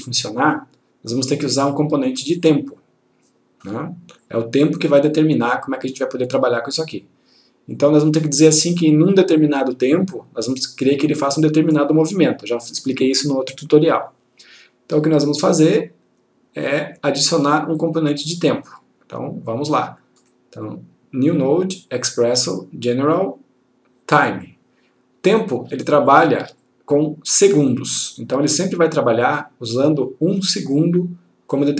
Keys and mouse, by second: 15.8-17.4 click, 20.3 right click, 24.5 click, 26.0 ctrl+click.